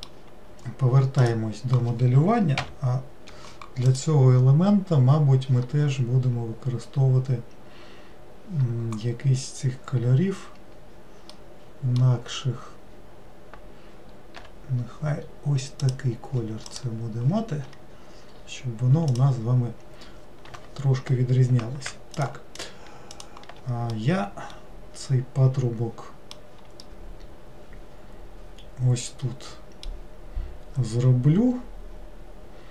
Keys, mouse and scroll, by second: 1.2 click, 11.3-14.3 middle drag, 14.3 g, 16.7 click, 17.6-18.5 scroll up 5, 19.1 click, 22.2 shift+click, 22.6 shift+click, 23.1 shift+click, 23.9-29.9 middle drag.